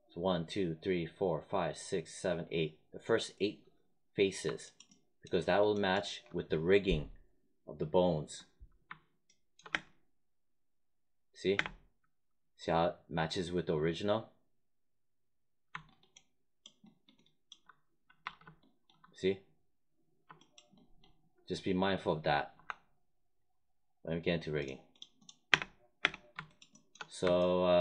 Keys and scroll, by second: 9.6 space, 11.4 space, 22.4 5, 25.4 space.